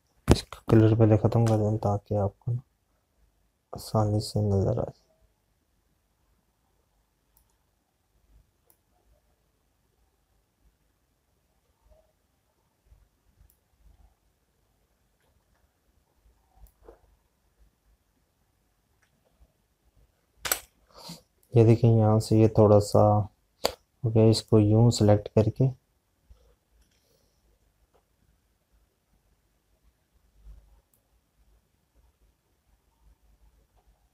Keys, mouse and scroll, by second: 1.2 z, 8.3 click, 17.5 alt+click, 21.3 Escape, 22.9 click, 33.0 click.